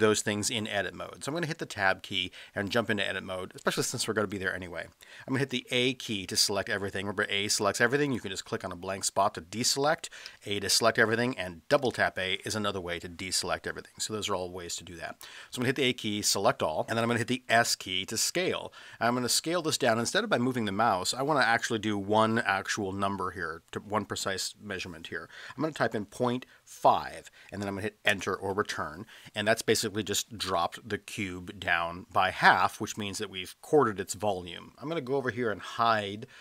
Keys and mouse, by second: 1.0 Tab, 5.6 a, 8.1 click, 10.3 a, 11.7 a, 11.9 a, 15.6 a, 17.6 s, 26.0 KP_Decimal, 26.8 KP_5, 28.2 Return.